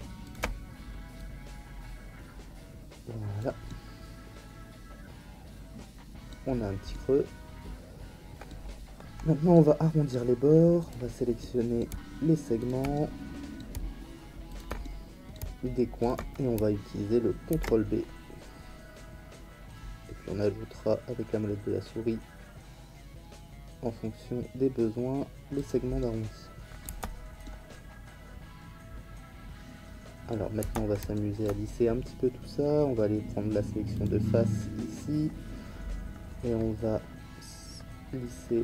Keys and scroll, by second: 17.5 ctrl+b, 26.8 Tab, 30.6 Tab.